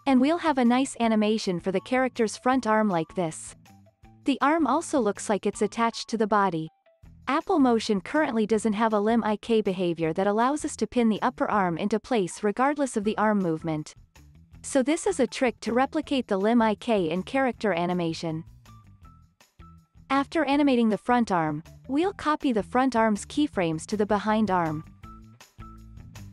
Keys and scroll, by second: 0.0 space, 7.1 space, 20.1 super+s, 26.0 super+c.